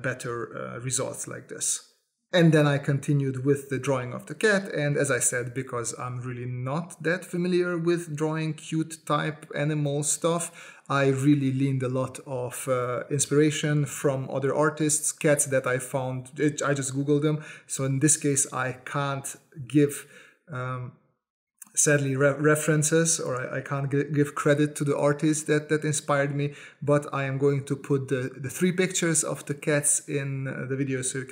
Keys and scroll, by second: 1.5-5.9 typing, 7.0 s, 8.4 s, 8.8 space, 11.1 s, 11.7 space, 11.8 s, 12.1 space, 14.2 space, 14.7 s, 17.5 space, 18.0 space, 18.5 space, 19.8-25.7 typing, 27.6 s, 28.0 space, 28.1 v.